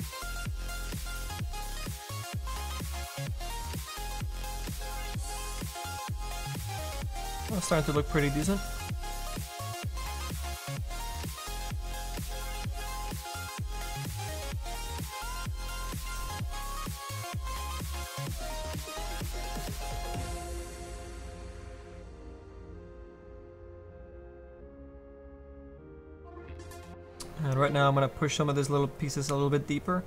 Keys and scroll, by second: 20.3 s.